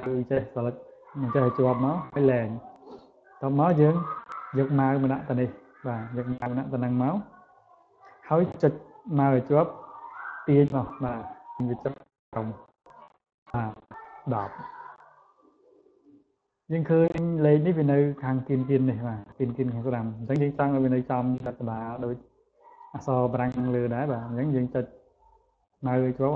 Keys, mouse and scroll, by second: 8.6-13.3 drag, 16.3 click, 17.9 click, 18.4 click, 18.7 click, 19.1 click, 19.4 click, 19.7 click, 21.1-23.8 drag.